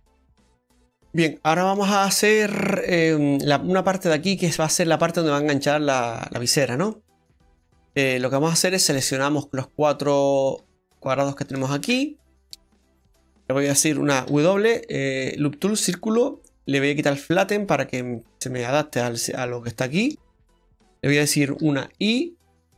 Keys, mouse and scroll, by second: 0.9 Tab, 0.9 scroll down 2, 1.0 middle click, 1.5 shift+middle click, 6.0-6.9 scroll up 2, 6.9 middle click, 9.8 click, 10.4 right click, 10.7 shift+right click, 11.9 middle click, 12.5 ctrl+z, 14.3 w, 17.7 click, 18.8 scroll up 1, 19.4 middle click, 19.4-19.8 scroll up 2, 20.0 shift+middle click, 20.5 middle click.